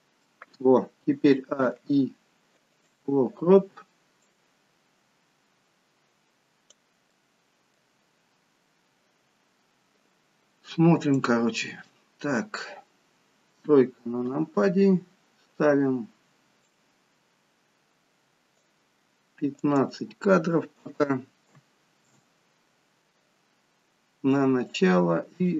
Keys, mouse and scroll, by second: 5.6-6.7 drag.